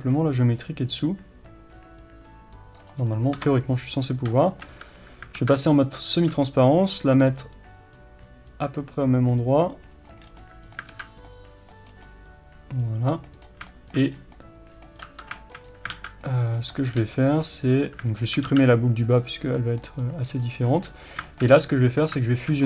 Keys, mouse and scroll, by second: 2.9 right click, 3.4 KP_Enter, 4.5-10.3 shift+middle drag, 5.4 alt+z, 5.8 scroll up 1, 6.2 shift+d, 10.3 scroll down 1, 10.4-16.8 middle drag, 11.0 alt+z, 11.9 scroll up 1, 13.5 scroll up 1, 14.2 scroll up 1, 15.1 1, 15.7-16.0 scroll up 1, 16.0 alt+a, 16.8 click, 17.1 g, 17.7 click, 19.2 x, 19.6-20.4 middle drag, 20.1-20.4 scroll up 2, 20.4 click, 20.8 g, 21.3-22.4 shift+middle drag, 21.7-22.4 scroll up 2, 22.4 shift+click.